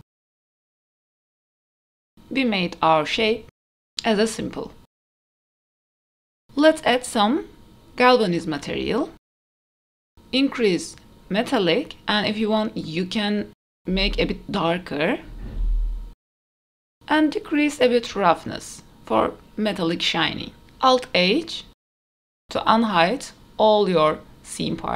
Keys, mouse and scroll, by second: 0.4 s, 1.0 middle click, 1.2 s, 1.9 middle click, 2.6 e, 3.6 Tab, 3.9 shift+middle click, 3.9-4.5 scroll down 2, 3.9 g, 5.5 shift+d, 5.8 click, 5.9 shift+middle click, 5.9 scroll up 2, 6.2 ctrl+s, 6.7 click, 7.3 click, 7.8-9.6 drag, 11.2-13.0 drag, 13.7 click, 16.8 click, 18.4-20.1 drag, 20.2 click, 20.4 click, 20.6 r, 21.7 click, 22.2 alt+h, 22.5 click, 23.1 click, 23.5-23.8 scroll down 2, 23.8-24.2 middle drag, 24.6 r.